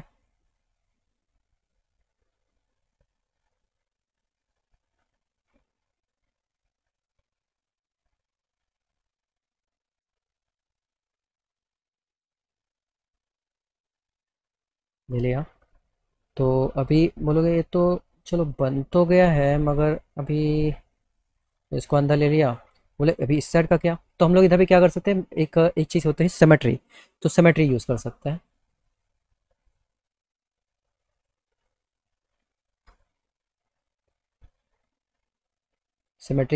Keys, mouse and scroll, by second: 0.6 click, 1.7 alt+middle click, 3.7 alt+middle click, 7.1 click, 8.8-11.1 drag, 12.8-14.8 drag, 15.9 click, 19.3-21.5 drag, 24.6 click, 27.7 s, 31.2 click, 33.1-34.5 alt+middle drag.